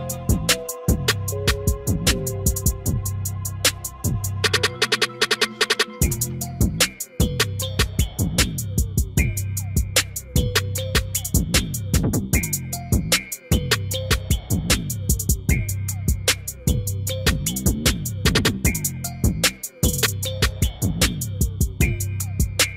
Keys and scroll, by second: 19.5 F4.